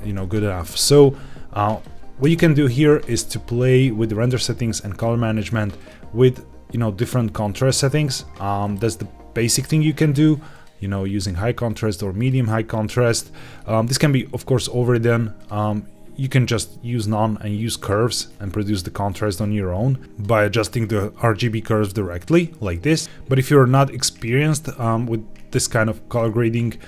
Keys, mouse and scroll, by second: 1.6 click, 5.7-8.8 drag, 10.4-12.2 drag, 13.4-15.3 scroll down 2, 15.3-16.2 drag, 17.7 click, 18.2-18.5 scroll down 2, 19.0 click, 19.3-20.0 scroll down 1, 20.0 click, 20.7 click, 22.1 click, 23.6 click, 26.0 click, 26.5-26.8 scroll up 2.